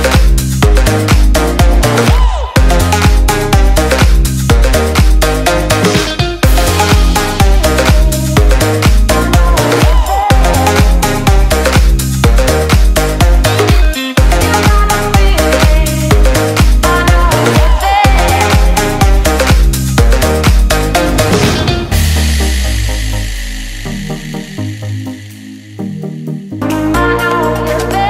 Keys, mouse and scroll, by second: 0.1-0.8 scroll down 1, 5.2-6.1 scroll up 1, 7.7 click, 8.0 scroll up 1, 8.3 scroll down 1, 8.5-9.9 scroll up 1, 9.9-11.4 scroll down 1, 12.0-13.4 click, 15.3 Return, 16.0 Up, 19.0-20.0 click, 20.6 Return, 22.1 click, 22.7 Delete, 23.5 click, 24.1 right click, 25.8 click.